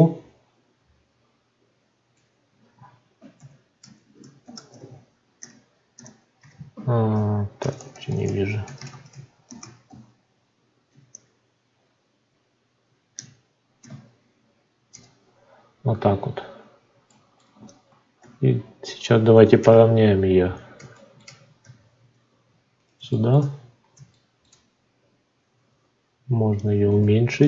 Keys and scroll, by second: 3.3 shift+-, 4.4 shift+l, 4.6 i, 6.3 t, 7.5 BackSpace, 9.4 shift+l, 9.8 i, 14.8 Return, 21.5 g.